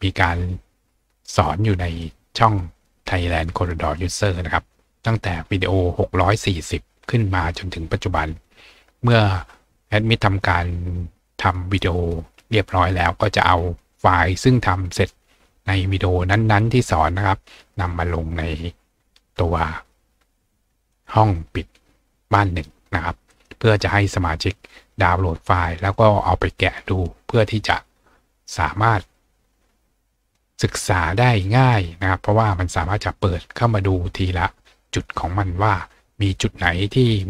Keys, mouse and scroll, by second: 1.1-2.9 scroll up 1, 2.9-4.4 scroll up 1, 20.9 click, 23.3 click, 30.2 click, 34.8-35.7 scroll down 2.